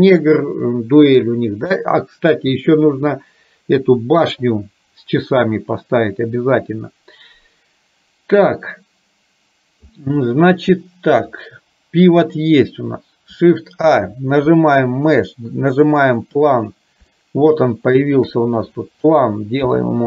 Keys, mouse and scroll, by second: 13.8 shift+a, 17.1-18.4 shift+middle drag, 19.8 r.